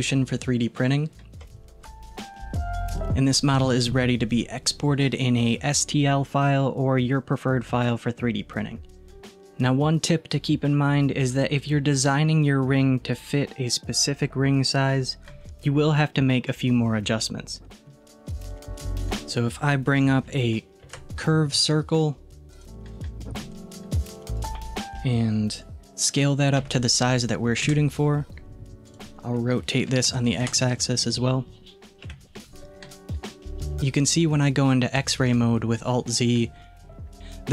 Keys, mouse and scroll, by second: 0.8-1.4 scroll down 1, 1.4 z, 2.3 scroll down 2, 9.5-10.0 scroll down 1, 10.0 middle click, 16.4-18.7 middle drag, 18.8 click, 20.9 shift+a, 24.4-25.7 drag, 28.9-32.0 drag, 32.1 KP_1, 35.2 alt+z, 36.8-37.2 scroll up 2.